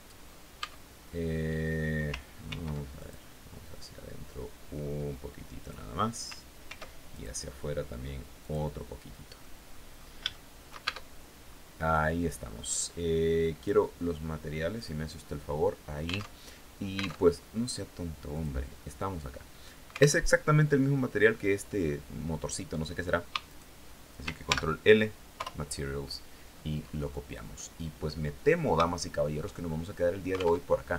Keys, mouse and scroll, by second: 0.0 Tab, 1.9 ctrl+r, 2.4 ctrl+click, 5.0 click, 6.1 ctrl+r, 6.6 ctrl+click, 7.8 click, 8.8 click, 9.7 shift+click, 10.3 shift+Tab, 10.9 scroll down 2, 11.2-11.6 scroll up 2, 11.9 scroll down 2, 13.0 click, 14.2 click, 15.2 scroll up 2, 15.8 alt+Tab, 16.6 alt+Tab, 17.8 click, 19.7 alt+Tab, 22.9 shift+right click, 23.9 ctrl+shift+l, 24.8 Return, 25.8-26.2 scroll down 2, 26.4 scroll down 2, 27.0 click, 27.9 scroll down 2, 28.3 shift+click, 29.1-29.5 shift+scroll up 3, 30.0 alt+Tab.